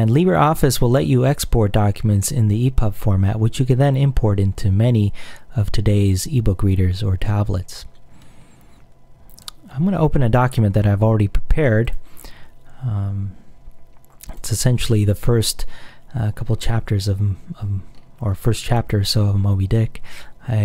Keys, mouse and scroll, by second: 9.3 click, 11.9 click, 14.3 click, 15.8-17.5 scroll up 1, 18.0-18.4 scroll down 1, 18.4-19.0 scroll up 2, 19.0 scroll up 1, 19.4-19.9 scroll down 2.